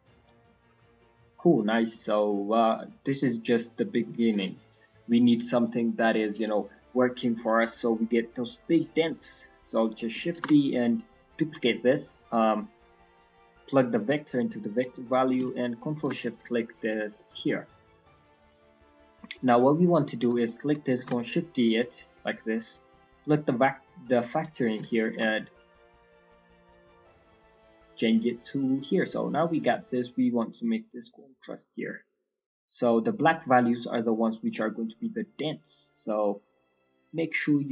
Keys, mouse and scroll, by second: 0.4-0.7 scroll down 2, 0.5 middle click, 0.7-1.0 scroll up 4, 1.0 middle click, 1.5 scroll down 3, 1.7 middle click, 2.2 middle click, 3.0 click, 4.4-5.1 scroll down 3, 5.1 middle click, 5.6-6.1 scroll down 2, 5.9 middle click, 8.9 scroll down 4, 9.1 middle click, 9.6 click, 9.9 middle click, 10.3 shift+d, 11.7-12.1 scroll down 2, 12.3 middle click, 13.5 click, 14.9 middle click, 15.1 scroll up 2, 15.6 ctrl+shift+click, 16.3 scroll down 3, 16.6 middle click, 16.8-17.9 scroll up 7, 17.1 middle click, 17.9 middle click, 18.1-18.7 scroll up 3, 18.7 scroll down 1, 18.8 middle click, 19.1 scroll down 3, 19.3 middle click, 20.6 click, 20.9 shift+d, 22.1 middle click, 23.0 click, 25.1 ctrl+shift+click, 25.4 middle click, 27.2 scroll down 2, 27.5 middle click, 27.8-28.1 scroll up 4, 29.3 scroll up 4, 30.2 click, 32.8 click, 34.9 middle click, 35.2-35.9 scroll up 2, 36.3 click.